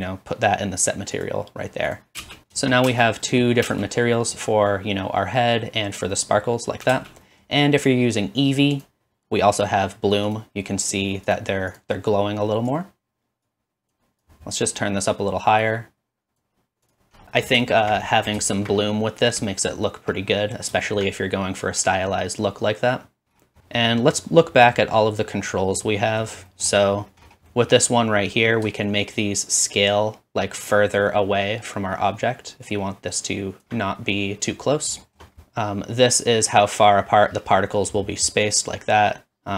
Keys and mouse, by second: 2.0-15.2 drag, 2.4 space, 3.0 space, 3.8 space, 7.0 space, 10.3 middle click, 10.3 right click, 10.8 middle click, 10.8 right click, 11.7 middle click, 11.7 right click, 12.8-14.1 middle drag, 12.8-14.1 right drag, 15.2-16.9 middle drag, 16.9-28.8 drag, 28.8-32.6 shift+middle drag, 35.4-38.5 middle drag.